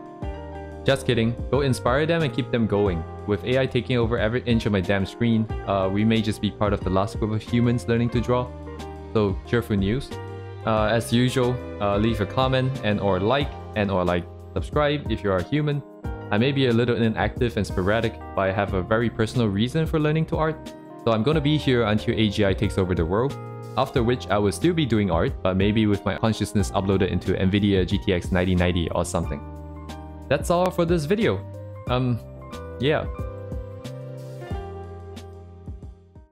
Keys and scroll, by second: 0.2 ctrl+z, 0.9 ctrl+z, 1.5 ctrl+z, 1.7 ctrl+z, 2.7 2, 2.8 ctrl+z, 2.9 2, 3.0 ctrl+z, 3.3 ctrl+z, 5.9 ctrl+z.